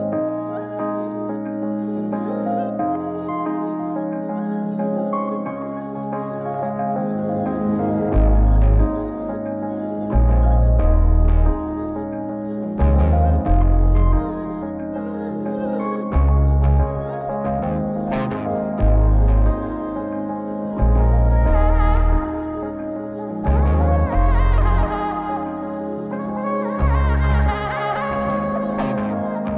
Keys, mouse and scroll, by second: 0.6-2.4 drag, 6.8 click, 7.7 shift+click, 10.0-12.1 alt+drag, 16.2 click, 17.5 click, 18.1-19.4 drag, 23.0 click, 25.3 click, 28.8-29.5 drag.